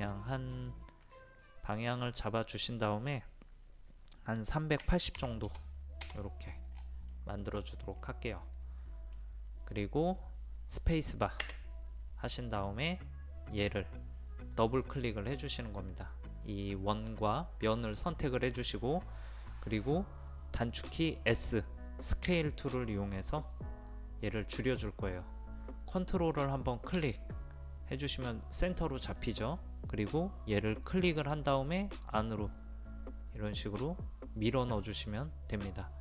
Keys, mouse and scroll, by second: 4.8 KP_3, 5.5 KP_0, 6.7-7.1 scroll down 1, 7.1-8.8 middle drag, 8.8 scroll down 1, 9.8-10.9 scroll down 1, 11.8 space, 14.6 click, 22.3 s, 30.9 click.